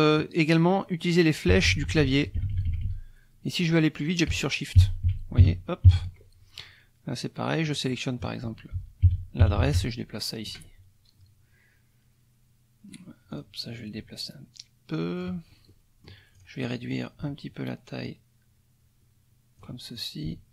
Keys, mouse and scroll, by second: 1.5 Down, 4.8 shift+Down, 5.4 shift+Up, 5.8 shift+Down, 7.6 click, 8.7 shift+Down, 13.3 click, 13.8 ctrl+click, 15.7 ctrl+middle click, 16.3 click, 18.0-19.8 ctrl+drag, 19.9 ctrl+click.